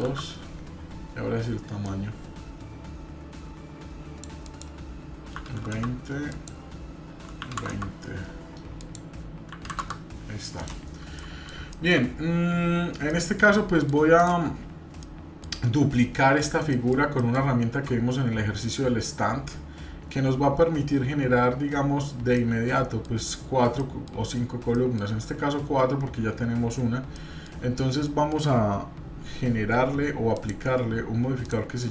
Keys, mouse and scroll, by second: 1.8-5.9 drag, 6.3-7.7 drag, 8.8 click, 9.8 click, 10.6 click, 11.2 middle click, 11.7 shift+middle click, 12.1-12.9 scroll up 1, 13.1 shift+middle click, 13.8 middle click, 14.1 click, 15.0 middle click, 16.6 scroll down 1, 16.7 shift+middle click, 17.2 shift+middle click, 17.8-18.3 scroll down 1, 22.4 shift+middle click, 27.1 middle click, 28.0 shift+middle click, 30.3 click, 31.4-31.9 drag.